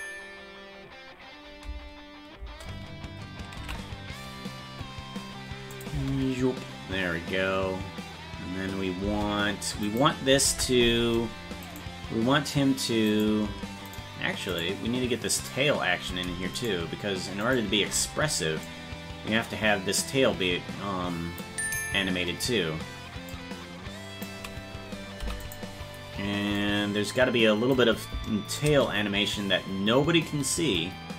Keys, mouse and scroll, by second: 1.6 space, 3.7 ctrl+s, 3.7 space, 5.7 click, 5.9 space, 9.8 right click, 10.4 ctrl+Tab, 11.7 right click, 13.9 right click, 14.2 shift+right click, 18.6-21.4 drag, 23.3 click, 25.1 i, 26.5-27.7 drag, 28.5-31.1 drag.